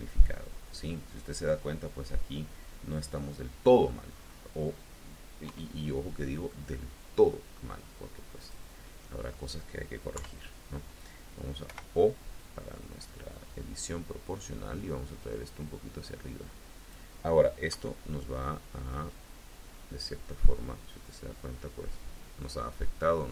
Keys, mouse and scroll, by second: 0.0 click, 0.9-3.4 middle drag, 3.4 click, 4.0-4.4 scroll up 2, 5.3 KP_3, 6.3-7.6 middle drag, 8.2 middle click, 8.7 middle click, 10.0 KP_3, 11.5 o, 12.2-13.2 drag, 17.5 KP_1, 20.6-23.3 drag.